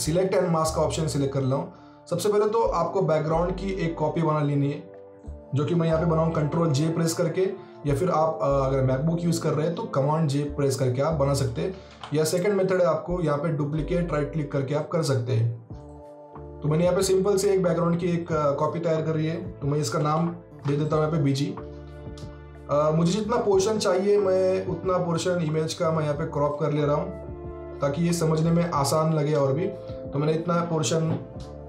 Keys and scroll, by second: 6.3 ctrl+j, 11.8 ctrl+z, 19.9 shift+b, 20.0 shift+g.